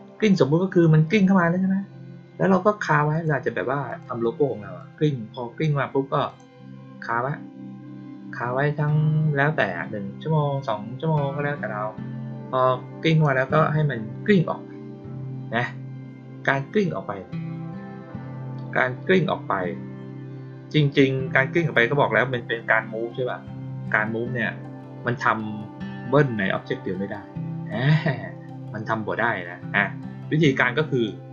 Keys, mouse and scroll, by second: 3.0 click, 3.8 click, 4.7-5.5 drag, 6.2 click, 13.0 click, 30.8 click.